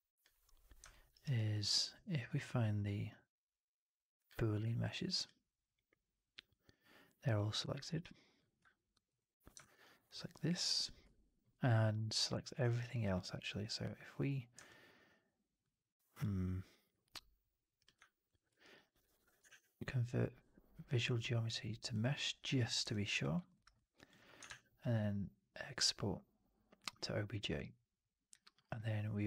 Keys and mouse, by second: 0.8 alt+middle click, 1.0 alt+right click, 1.3 alt+click, 7.9-8.3 alt+drag, 9.0-9.5 shift+drag, 9.5 alt+middle drag, 9.7 alt+middle drag, 10.0 alt+middle drag, 10.2-10.8 alt+drag, 12.6 alt+right drag, 12.8 alt+drag, 13.1 alt+middle drag, 13.5-14.4 drag, 14.6-15.5 alt+drag, 18.5 alt+drag, 18.8 alt+middle drag, 18.9 alt+right drag, 19.4 shift+Tab, 22.8-23.1 alt+drag, 23.3 alt+middle drag, 23.4 alt+right click, 23.7 alt+click, 24.4 shift+Tab.